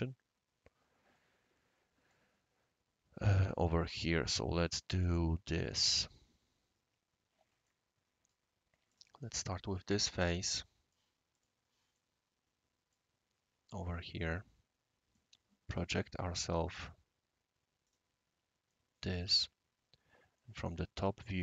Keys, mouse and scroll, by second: 1.1-2.1 right drag, 7.6-8.3 right drag, 8.9 click, 9.2 right click, 9.7 scroll up 1, 9.7 scroll down 1, 9.8 scroll up 1, 9.9 scroll down 1, 10.1 scroll up 2, 10.3 scroll down 1, 10.4 scroll up 1, 10.4 scroll down 1, 10.5 scroll up 1, 10.6 right click, 11.3 click, 11.9-12.9 right drag, 13.1 scroll up 1, 13.2-13.6 scroll down 2, 13.6 scroll up 1, 13.8 scroll down 1, 14.2-15.1 right drag, 15.7-16.1 typing, 16.7 click, 17.8 click, 18.7 middle click, 19.8-20.3 scroll up 1.